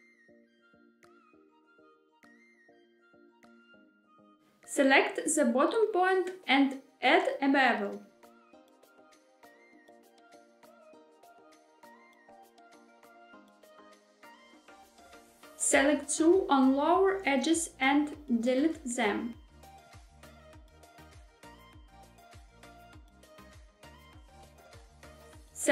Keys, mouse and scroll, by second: 1.5 x, 4.3-5.4 middle drag, 5.9 scroll up 1, 6.3 shift+middle click, 8.2 click, 9.9 ctrl+shift+b, 13.2 click, 14.2 2, 15.5 click, 16.6 shift+click, 17.5 shift+click, 18.4 shift+click, 19.3 shift+click, 20.0 shift+click, 20.5 x, 24.3 KP_1, 25.3 3.